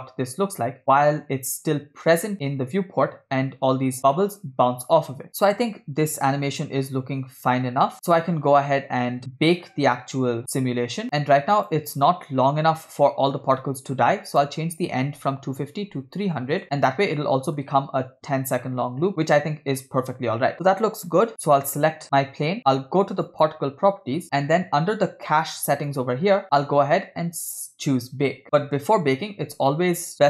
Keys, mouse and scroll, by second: 0.8 space, 5.3 middle click, 10.4 space, 11.0 click, 14.3-16.6 drag, 16.2 0, 16.9 scroll down 2, 17.1 middle click, 17.7-19.2 space, 19.3 space, 21.4 click, 23.3 click, 24.2-25.8 scroll up 5, 25.9 click.